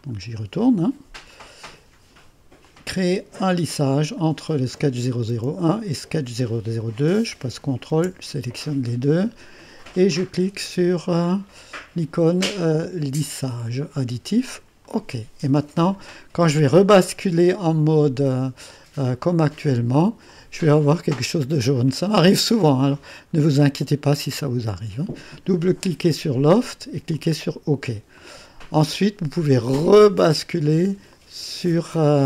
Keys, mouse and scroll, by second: 0.0 click, 1.3 click, 2.7 click, 4.2 click, 7.6 click, 13.2 click, 14.8 click, 16.0 click, 18.2 click, 19.4 click, 20.3 click, 21.2-23.2 drag, 24.2 click, 25.9 click, 26.3-29.1 drag, 30.2 click, 31.2 click.